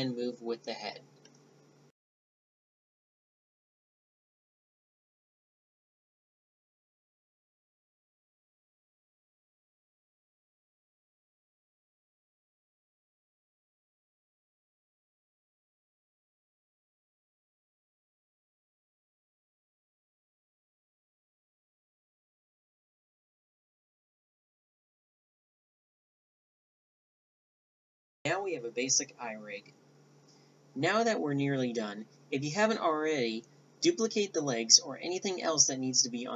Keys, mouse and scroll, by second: 0.9 a, 1.9-2.9 right drag, 3.0 right click, 4.8-6.8 middle drag, 4.9 z, 5.1 z, 6.8 ctrl+z, 7.8 right click, 8.0 a, 9.2 right click, 10.0 click, 10.4 ctrl+z, 10.4 right drag, 10.6 click, 10.8-11.2 right drag, 11.0 a, 11.7 middle click, 11.8 click, 12.4 click, 13.0 ctrl+p, 13.6-13.9 drag, 14.0-17.3 typing, 18.5 a, 20.2 click, 21.2 right click, 22.0 shift+z, 23.0 g, 24.8 click, 25.2 right click, 25.7 s, 25.9 click, 26.8 Delete, 27.4 KP_1, 28.6 b, 29.9 b, 30.1 b, 33.4 shift+c, 34.1 shift+d, 34.5 s.